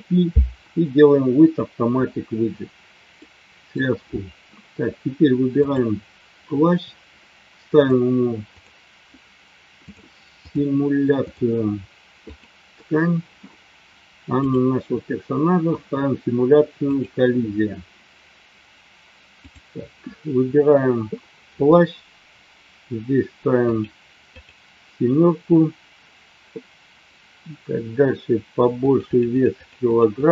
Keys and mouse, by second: 3.2 middle click, 5.5 click, 7.8 click, 11.1 click, 12.3 click, 19.4 click, 23.7 click, 24.4 click, 28.8-30.3 drag.